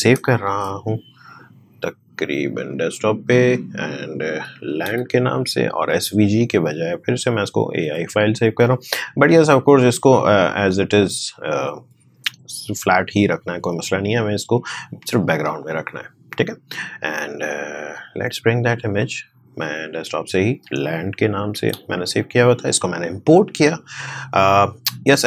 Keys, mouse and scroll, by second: 0.4 ctrl+shift+s, 2.6 click, 4.3-5.4 typing, 6.3 click, 11.6 click, 17.3 click, 21.1-22.2 typing.